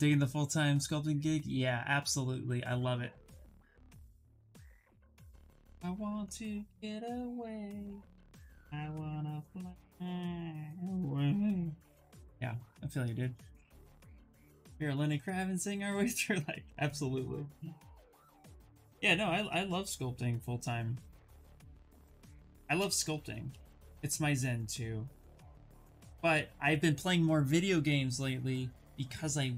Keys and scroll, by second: 15.7 s, 22.6 ctrl+z, 22.7 ctrl+z, 23.1 ctrl+z.